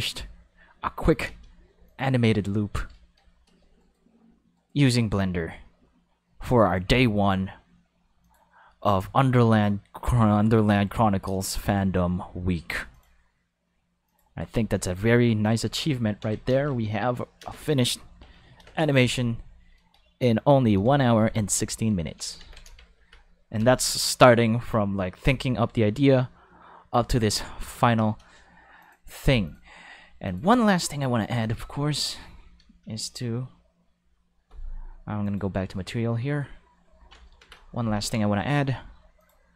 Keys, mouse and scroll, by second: 1.2 space, 1.4 5, 1.8 click, 3.8 right click, 4.5 right click, 8.2 click, 9.5 click, 12.9 click, 14.0 click, 14.9-15.4 drag, 15.8 alt+a, 15.9 5, 16.5 ctrl+space, 16.6 5, 17.4 space, 17.5 5, 18.6 ctrl+space, 18.7 5, 20.0 shift+middle click, 20.9 shift+middle click, 22.4 ctrl+5, 23.6 space, 23.7 5, 24.7 alt+a, 24.9 5, 28.0 space, 28.1 5, 28.8 click, 29.4 click, 30.2 click, 31.5-32.1 drag, 35.2 click, 37.9 ctrl+5, 39.2 click.